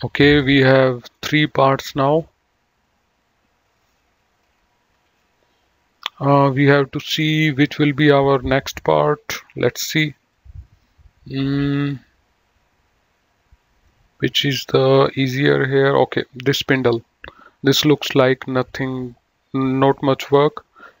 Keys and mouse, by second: 0.3 middle click, 1.0 click, 5.0 F9, 8.5 middle click, 10.0 click, 16.4 click.